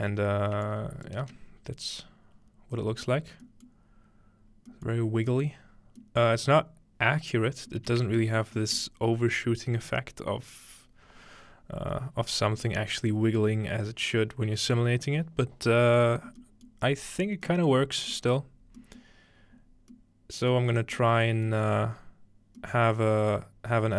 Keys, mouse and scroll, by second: 0.2-0.6 scroll up 2, 0.7 click, 1.2 space, 1.9-2.4 scroll down 1, 2.8-4.7 middle drag, 4.9-5.3 middle drag, 5.5-6.0 middle drag, 6.2-7.8 middle drag, 7.9-8.6 shift+middle drag, 8.8-10.5 middle drag, 13.4-16.4 middle drag, 16.7-17.5 middle drag, 17.7-18.1 middle drag, 18.4-18.8 middle drag, 19.0 middle click, 21.5-22.6 middle drag.